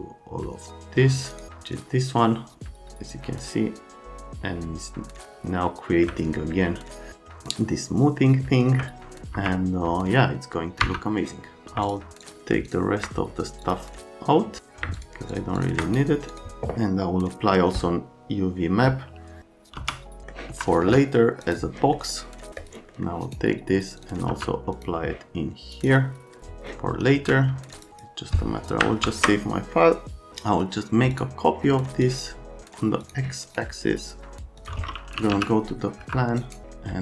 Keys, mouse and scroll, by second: 5.6 middle click, 7.1 middle click, 9.3 F3, 10.8 F3, 11.8 ctrl+Home, 12.2 ctrl+Home, 12.7 ctrl+click, 13.6 click, 14.9 ctrl+click, 15.3 ctrl+click, 15.6 ctrl+click, 15.8 right click, 16.3 click, 19.8 b, 20.2 middle click, 20.5 F3, 20.8 F3, 21.4 click, 21.9 middle click, 22.6 click, 22.9 scroll up 1, 23.2 scroll down 1, 23.9 right click, 27.1 c, 27.7 middle click, 27.9 middle click, 29.1 ctrl+s, 31.1 click, 32.0 click, 33.0 click, 33.4 right click, 34.6 click, 34.9-35.8 typing.